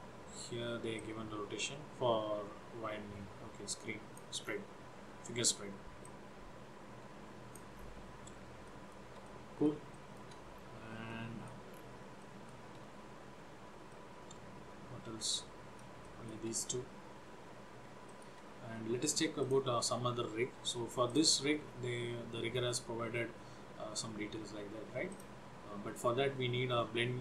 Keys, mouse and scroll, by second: 1.1 click, 4.5 scroll down 4, 5.3-6.1 scroll up 3, 6.1 click, 8.8 shift+middle click, 9.3 middle click, 10.0 shift+middle click, 10.7 scroll down 1, 11.3 middle click, 11.8-12.4 scroll down 3, 12.4 shift+middle click, 14.2 middle click, 16.1 shift+middle click, 17.8 scroll up 1, 18.2 shift+middle click, 19.5 click, 21.2 click, 25.3 click.